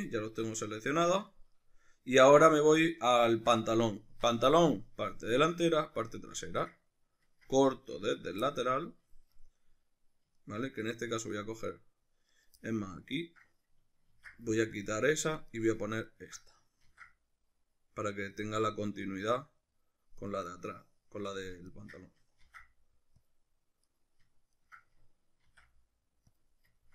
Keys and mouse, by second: 8.1 right click, 8.5-11.2 middle drag, 11.2 right click, 12.3 right click, 12.6 middle click, 13.1 ctrl+right click, 14.1 ctrl+e, 15.4 right click, 16.0 ctrl+right click, 16.8 ctrl+e, 19.0 middle click, 20.2 right click, 20.7-21.7 shift+middle drag, 21.7 ctrl+right click, 22.5 ctrl+e, 23.9 right click, 24.5 ctrl+right click, 25.5 ctrl+e, 26.8-26.9 ctrl+middle drag.